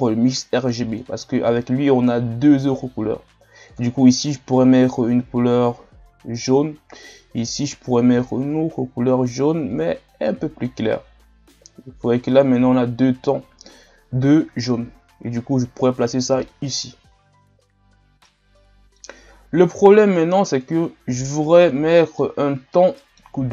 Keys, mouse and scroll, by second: 16.6-18.2 drag, 18.2-20.2 middle drag, 20.2-22.1 drag, 22.1 middle click, 22.3-22.7 scroll up 2, 22.7-23.5 middle drag.